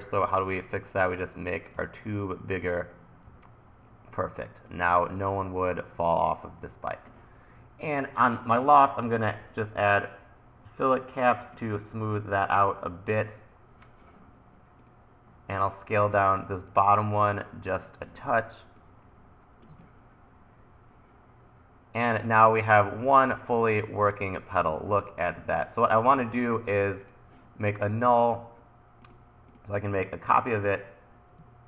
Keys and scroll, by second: 1.9 e, 4.8 super+z, 16.2 t, 18.0 e, 24.7 1, 26.2 super+s.